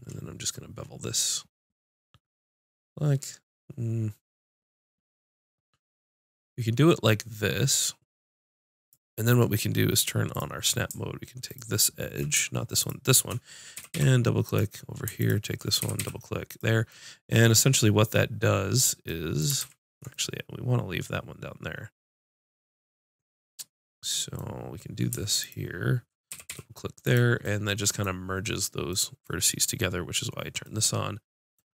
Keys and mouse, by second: 8.9-13.6 right drag, 13.6-14.7 drag, 13.8 g, 15.2-16.4 drag, 15.8 g, 19.6 ctrl+z, 25.4-27.4 drag, 26.3 g, 28.8 click.